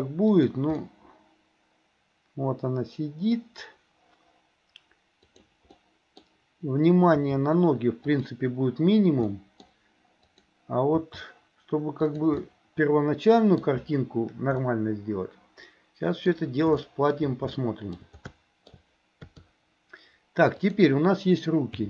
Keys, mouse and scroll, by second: 0.8-3.4 middle drag, 5.4 click, 5.8 middle click, 7.2 r, 9.4 middle click, 10.3 click, 11.0 r, 12.4-13.7 middle drag, 14.6-16.3 middle drag, 16.3 scroll down 1, 16.8 shift+middle click, 17.6 shift+middle click, 18.3 shift+middle click, 18.7 scroll down 1, 19.3 KP_3, 20.6 click.